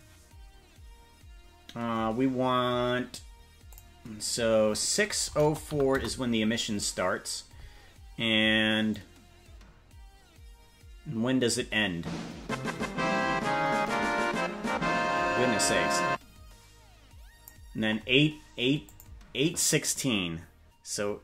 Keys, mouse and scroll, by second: 3.7-6.4 drag, 9.0-17.6 drag, 18.8-21.2 drag.